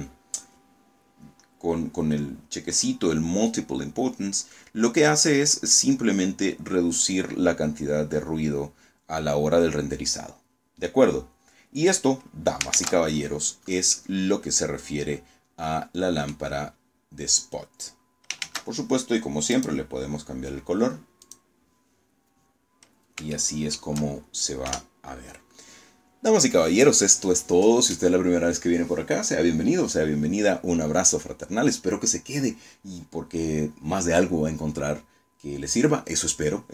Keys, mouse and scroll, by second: 9.2-9.5 scroll down 1, 9.7-11.0 middle drag, 11.6 shift+z, 12.2-12.5 shift+scroll down 3, 12.8-15.4 middle drag, 15.6-16.0 scroll up 2, 17.3 shift+z, 18.4 click, 20.1 click, 21.2 scroll down 2, 22.2-22.9 shift+middle drag, 23.5 KP_0.